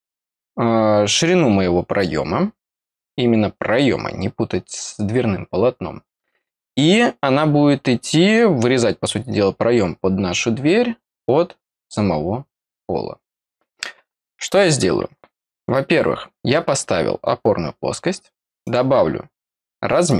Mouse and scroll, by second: 15.4 click, 18.6 click, 20.0 click.